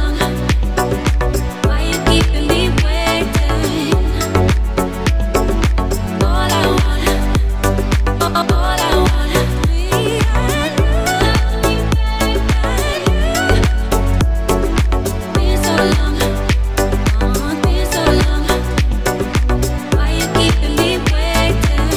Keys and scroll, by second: 12.8 Right, 13.5-14.0 Up.